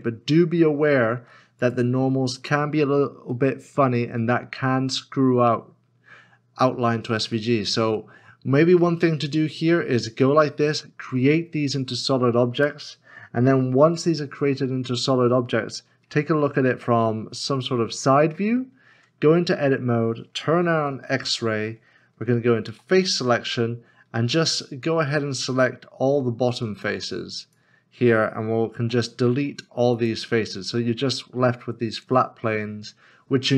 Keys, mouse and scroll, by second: 3.3 middle click, 7.3 middle click, 16.4 middle click, 16.6 KP_9, 17.3 KP_1, 18.9 Tab, 20.1 scroll up 1, 20.9 alt+z, 22.7 3, 28.8 x, 31.0 middle click, 31.7 scroll down 1, 32.4 middle click.